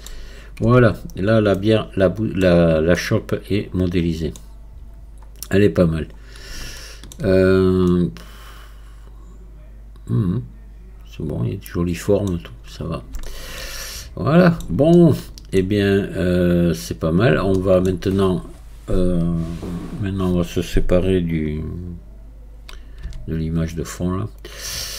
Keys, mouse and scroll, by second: 0.1 scroll down 1, 0.7 Tab, 1.1 scroll down 1, 1.6 middle click, 2.5 scroll down 2, 3.0-5.3 middle drag, 5.3-6.2 scroll up 1, 6.2 scroll up 2, 6.8 shift+middle click, 7.4 scroll up 1, 7.9-10.9 middle drag, 12.4-13.3 scroll down 6, 13.3-17.1 shift+middle drag, 17.1 scroll down 1, 17.6-19.9 shift+middle drag, 19.9-22.9 drag.